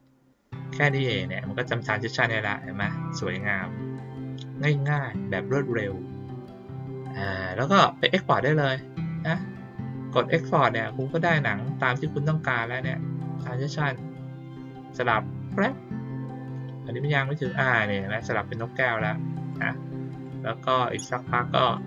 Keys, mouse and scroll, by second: 0.7 click, 0.9 click, 4.8 click, 7.6 click, 10.9 click, 19.4 click, 20.2 click, 20.9 click, 21.6 click.